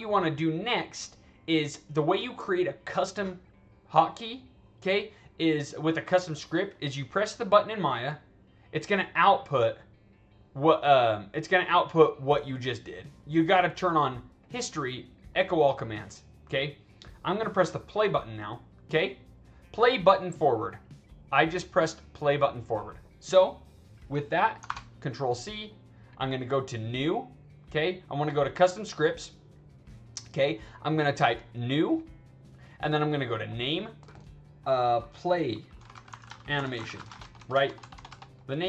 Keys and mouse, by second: 8.1 click, 8.6 click, 12.3 click, 13.1 click, 15.2 click, 17.9 click, 18.5 click, 20.6-22.4 drag, 24.6 ctrl+c, 26.0 click, 27.9 click, 28.2 click, 28.9 click, 31.6 click, 33.3 click, 35.8-37.3 typing.